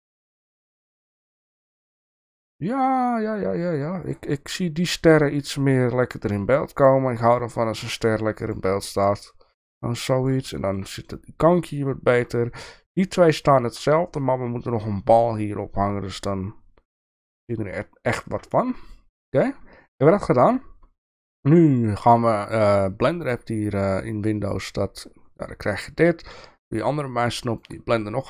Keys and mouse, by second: 0.4-4.2 drag, 6.3 click, 7.3 click, 8.4 click, 9.1-10.4 drag, 10.5 shift+middle drag, 11.7-12.1 shift+middle drag, 13.4-13.7 shift+middle drag, 18.5 shift+middle click.